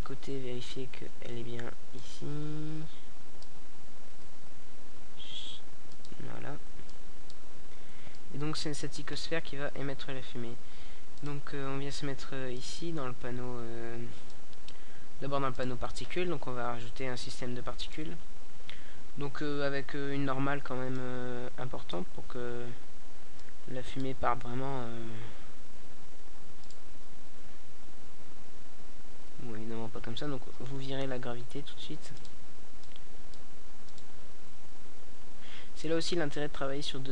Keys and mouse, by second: 4.5-18.2 drag, 18.2 a, 19.6-23.1 drag, 23.1-26.7 middle drag, 26.7-29.1 drag.